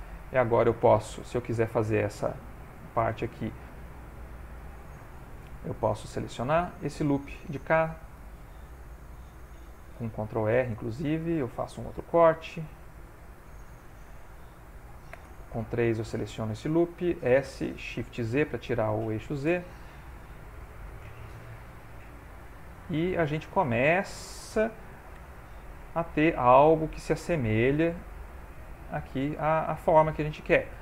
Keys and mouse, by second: 1.0 ctrl+middle click, 1.6 shift+middle click, 2.6 ctrl+middle click, 3.1 ctrl+middle click, 3.6 shift+middle click, 3.9 shift+middle click, 4.0 ctrl+middle click, 6.0 alt+click, 7.6 2, 7.9 alt+click, 9.9 ctrl+r, 11.9 ctrl+r, 15.1 3, 15.4 click, 16.0 alt+click, 17.4 s, 20.3 ctrl+r, 22.4 s, 25.1 g, 26.9 ctrl+middle click, 27.5 middle click, 28.0 ctrl+middle click, 28.4 middle click, 29.3 shift+middle click, 30.5 ctrl+middle click.